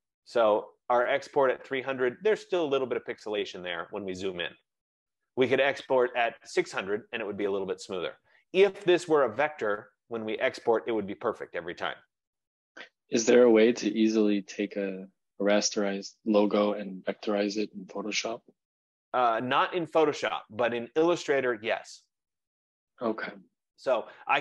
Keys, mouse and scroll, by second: 0.2 ctrl+z, 0.3-0.7 ctrl+z, 0.8 click, 1.7 F15.